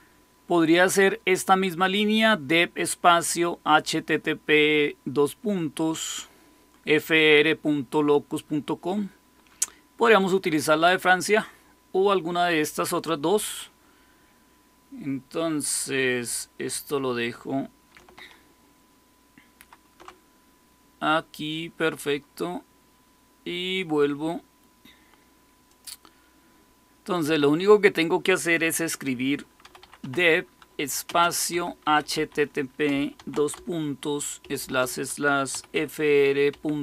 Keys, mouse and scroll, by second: 19.5 shift+super+', 25.6 click, 27.1 click, 29.3-33.1 typing, 34.3-36.8 typing.